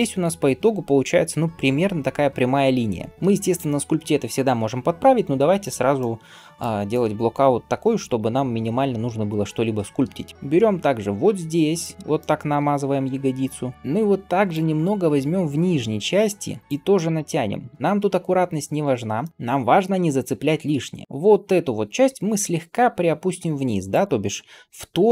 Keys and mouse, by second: 3.1-25.1 shift+right drag, 7.9 click, 7.9 middle click, 14.4 click, 14.4 middle click, 14.9 g, 16.9 click, 16.9 middle click, 17.8 g, 19.3 g, 21.0-23.9 drag, 21.0-23.9 middle drag, 21.9 g.